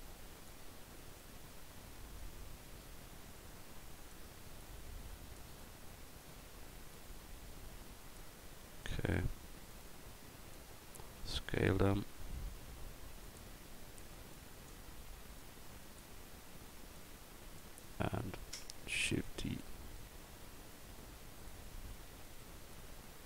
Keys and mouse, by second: 0.5-4.1 drag, 4.6 click, 7.0-8.2 drag, 8.2-9.7 right drag, 9.7-10.6 drag, 11.2 s, 17.0 click, 19.1 shift+d, 20.0-21.5 drag, 22.1 shift+d, 22.7-23.2 drag.